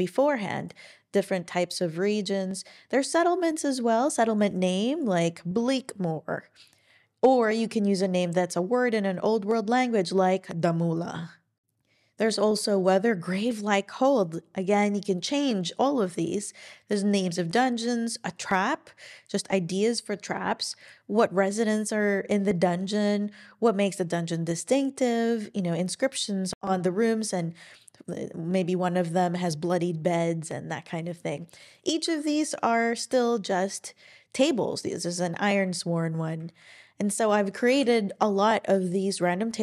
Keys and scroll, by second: 32.0 super+e, 37.7 super+e.